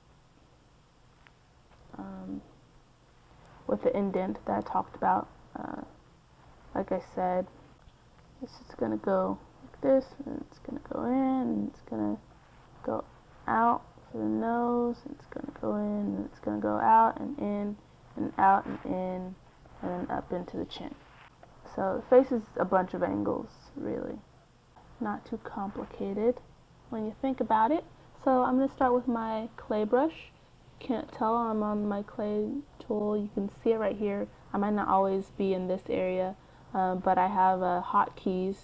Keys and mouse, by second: 0.6 n, 3.8-5.2 drag, 5.2 middle click, 5.8 KP_3, 6.6-18.0 d, 7.5 click, 19.4 n, 20.4-21.6 drag, 22.6-24.3 drag, 24.3-25.4 middle drag, 25.4 KP_1, 27.5 c, 29.8-31.3 drag, 35.4-37.3 drag, 38.2 c.